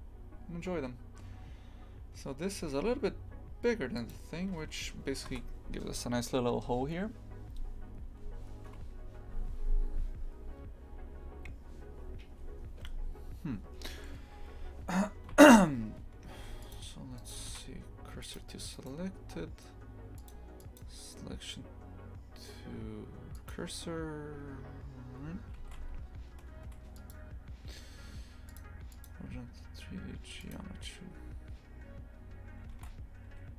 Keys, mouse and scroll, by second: 15.3 shift+f, 17.2-18.3 right drag, 18.3 shift+s, 18.7-23.5 right drag, 25.6 shift+f, 30.5-33.5 drag.